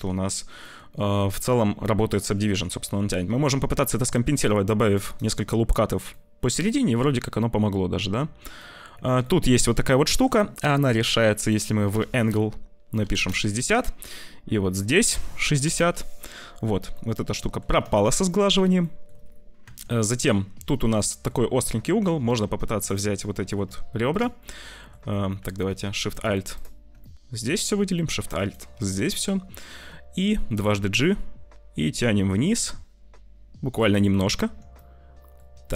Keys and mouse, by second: 0.5 click, 1.9 Tab, 2.3 Tab, 3.2 ctrl+r, 5.2 Tab, 6.2 click, 6.6 click, 8.1 Tab, 8.4 click, 8.9 Tab, 9.1 click, 9.4 Tab, 9.9 Tab, 11.4-13.2 drag, 14.6-15.8 drag, 16.8 click, 17.8 shift+middle click, 18.8 shift+middle click, 19.5 Tab, 20.8 click, 21.1 middle click, 22.0 middle click, 22.3 2, 23.1 middle click, 24.0 shift+middle click, 24.4 shift+middle click, 25.2 middle click, 26.9 middle click, 28.9 middle click, 30.5 g, 34.3 Tab, 34.8 click, 35.4 Tab.